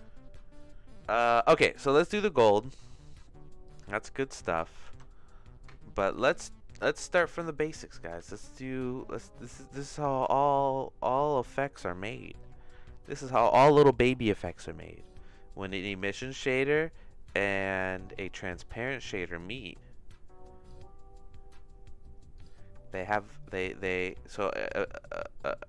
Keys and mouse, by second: 2.1 middle click, 2.5 click, 2.8 click, 3.6 click, 4.8 shift+a, 8.2 shift+a, 15.7 click, 16.4 shift+a, 18.6 shift+a, 23.9 click.